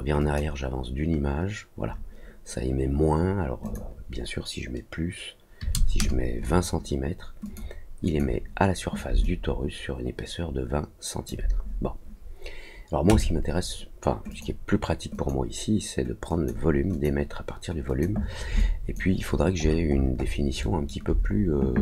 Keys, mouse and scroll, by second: 0.1 click, 3.6 click, 7.4 click, 8.0 click, 9.2-11.2 alt+drag, 13.0 click, 14.2 click, 15.1 click, 16.2 click, 16.9 click, 17.8 click, 18.5 alt+click, 19.2 alt+middle click, 19.6 alt+middle click, 19.9 alt+middle click, 20.0-20.4 alt+scroll down 2, 20.6 alt+middle click.